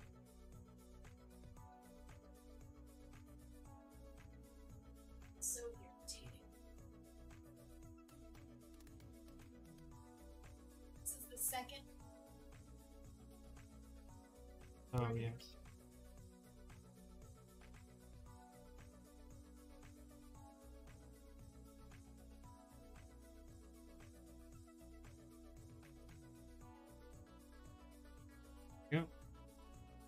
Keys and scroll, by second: 22.1 ctrl+z.